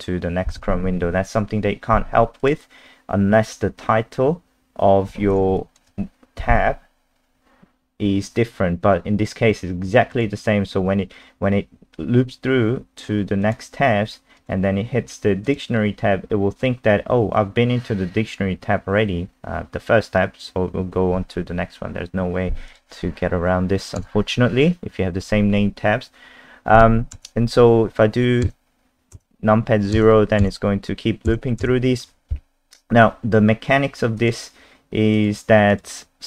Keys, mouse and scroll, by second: 2.4 click, 5.6 alt+click, 10.1 click, 24.0 KP_0, 31.6 KP_0, 34.2 click.